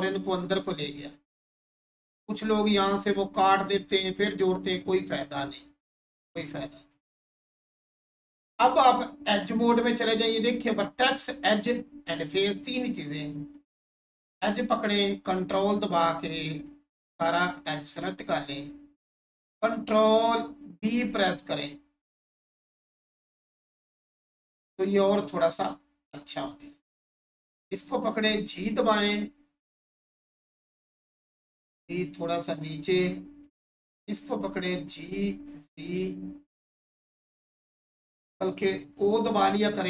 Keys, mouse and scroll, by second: 1.6 click, 2.2 1, 5.8 click, 6.5 scroll up 1, 7.8 alt+shift+click, 13.5 click, 15.2 ctrl+click, 24.0 click, 27.0 click, 32.6 click, 34.1-35.8 scroll down 1, 37.1 click.